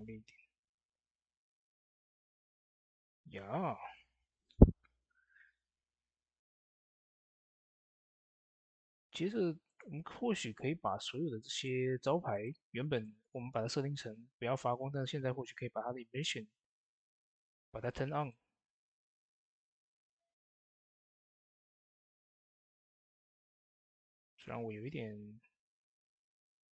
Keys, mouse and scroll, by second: 2.3 click, 2.3 typing, 3.4 ctrl+s, 8.3-9.1 typing, 8.6 click, 14.4-15.3 scroll down 1, 18.0 scroll down 1, 18.0 typing, 18.0 click, 23.5 click, 23.5-24.3 typing, 23.6-26.4 drag, 26.5 click, 26.5 typing.